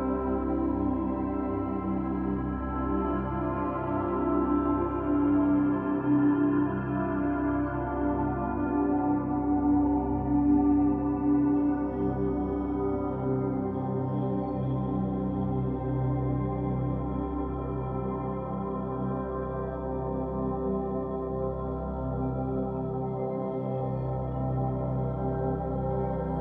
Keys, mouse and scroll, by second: 0.7-2.4 middle drag, 2.4-2.9 scroll up 8, 3.6 click, 4.3 click, 6.3-9.3 drag, 10.4-10.7 scroll down 3, 10.7 middle click, 10.9 scroll up 3, 12.0 3, 12.4 click, 12.7 alt+shift+click, 12.8 alt+shift+click, 14.1 ctrl+click, 14.3-15.7 middle drag, 15.7 ctrl+click, 16.7 ctrl+click, 17.7 ctrl+z, 18.2 ctrl+click, 19.2 ctrl+click, 19.4-20.8 middle drag, 20.8 ctrl+click, 21.1 middle click, 21.9-22.3 scroll up 1, 22.3 a, 22.5 scroll down 4, 22.8 g, 25.4-25.9 scroll down 8, 25.9 g.